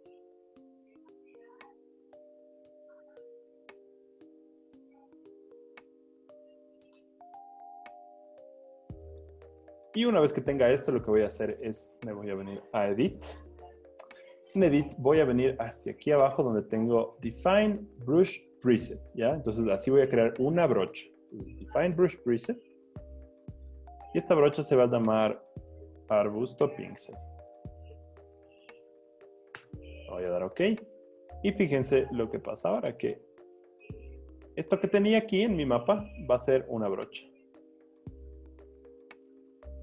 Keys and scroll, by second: 7.0 Return, 25.6-27.5 typing, 37.1 super+z, 37.7 c, 39.2 Home.